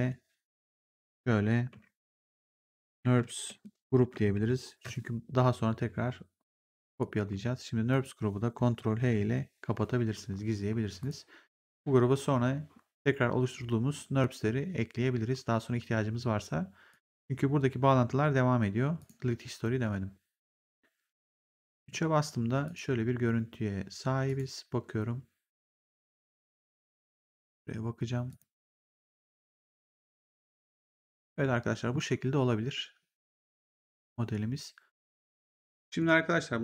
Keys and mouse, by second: 0.7 click, 2.0-4.8 typing, 6.8 click, 9.0 ctrl+h, 10.9 click, 16.8 click, 18.9 click, 21.7 3, 22.6 click, 24.2 click, 26.2 click, 28.2 click, 35.0 click, 35.9 click.